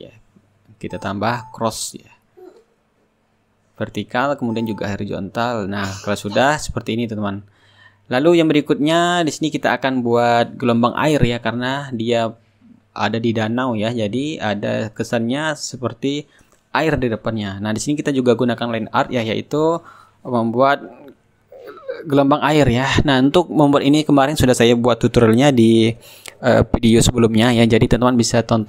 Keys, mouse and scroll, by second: 1.3 ctrl+click, 2.7 ctrl+click, 4.0 Return, 4.3 shift+click, 4.4 right click, 4.7 ctrl+click, 5.0 ctrl+click, 5.6-14.6 shift+drag, 6.5-14.6 shift+right drag, 15.6 click, 17.5-19.9 drag, 18.2-19.9 right drag, 20.3 click, 21.6 ctrl+click, 25.7 ctrl+click, 26.9 ctrl+click, 27.1 ctrl+middle click, 27.9 click, 28.4 Return.